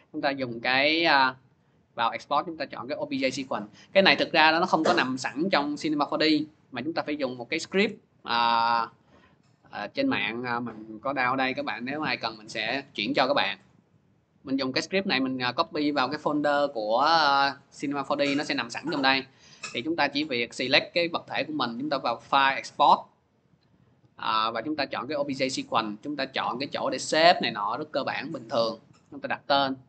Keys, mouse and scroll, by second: 7.3 click, 7.5 alt+Tab, 8.4 alt+Tab, 11.2 click, 12.3 click, 13.4 click, 18.6 click, 20.3 click, 21.6 click, 24.9 click, 27.0 click.